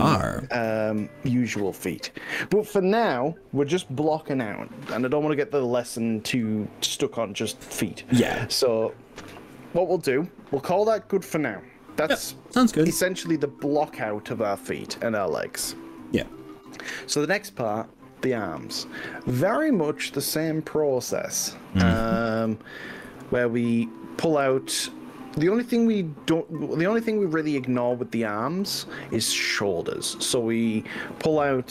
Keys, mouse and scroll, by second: 1.2-2.2 middle drag, 3.2 scroll up 1, 3.8-8.4 middle drag, 11.6-13.4 middle drag, 16.2-19.6 middle drag, 23.2 KP_8, 23.8 KP_5, 24.4 KP_6, 25.7-26.3 shift+middle drag, 26.6 shift+scroll down 2, 27.4 shift+scroll up 2, 27.8-28.2 scroll down 2, 28.5-31.7 middle drag.